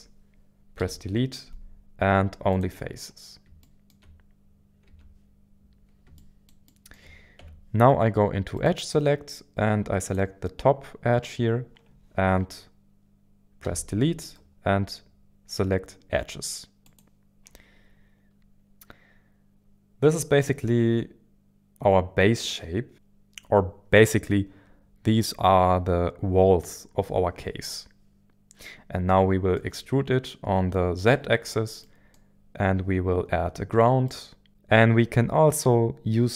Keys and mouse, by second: 0.8 Delete, 3.6 shift+middle click, 4.9 Tab, 6.2-7.4 shift+middle drag, 7.4 Tab, 8.6 click, 13.6 Delete, 18.4 KP_1, 18.4 KP_7, 29.1 middle click, 31.8-32.9 middle drag, 34.0-34.5 middle drag.